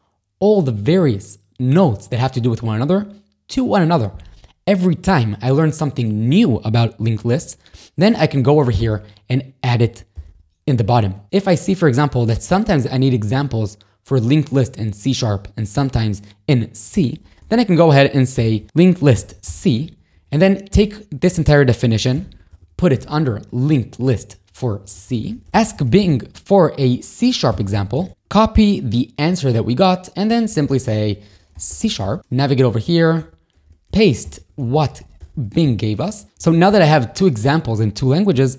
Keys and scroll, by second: 7.4 ctrl+], 8.9 shift+g, 10.2 g, 17.1 o, 17.9 Return, 18.4 [, 19.2 shift+c, 19.5 j, 20.8 shift+g, 21.9 x, 23.0 w, 24.3 ctrl+], 24.3-26.5 typing, 27.6 shift+c, 28.0 shift+space, 29.4 ctrl+shift+j, 30.1 ctrl+shift+k, 30.5 y, 31.7-36.7 typing, 32.2 ctrl+], 38.3 shift+v.